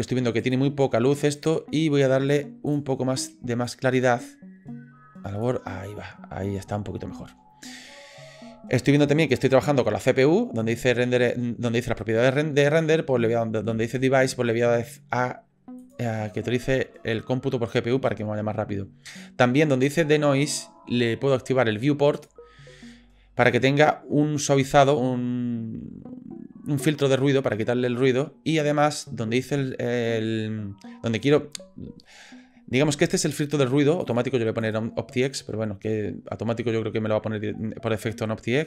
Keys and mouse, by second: 0.4-0.8 drag, 1.4-2.4 drag, 2.7 click, 9.0 click, 14.8-16.0 drag, 22.2 click, 34.0 click.